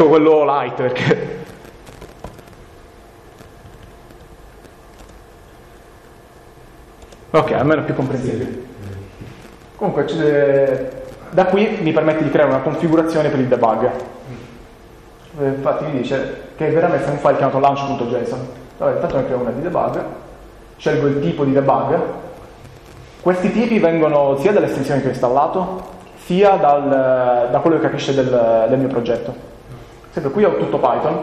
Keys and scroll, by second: 1.1 ctrl+shift+p, 2.3 typing, 3.4 Down, 3.6 Down, 7.0 Return, 21.2 Down, 21.6 Up.